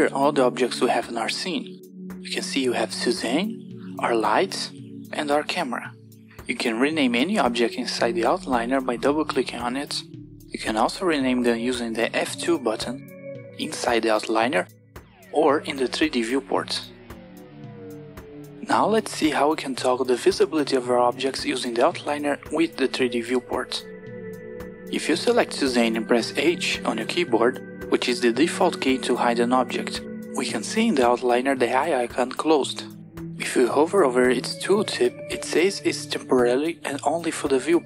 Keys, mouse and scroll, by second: 8.7 click, 12.4 F2, 16.5 F2, 24.8 click, 26.2 h.